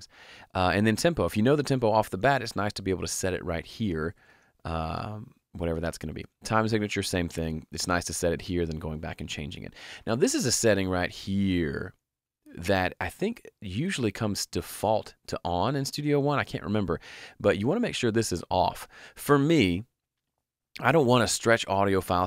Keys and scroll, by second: 3.8-4.7 typing, 4.8 Return.